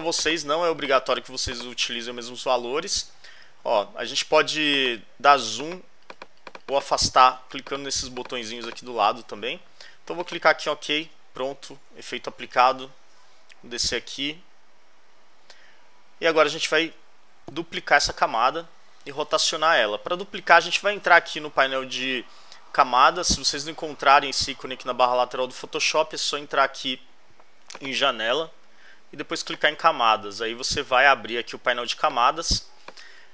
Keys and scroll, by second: 12.0 alt+Left.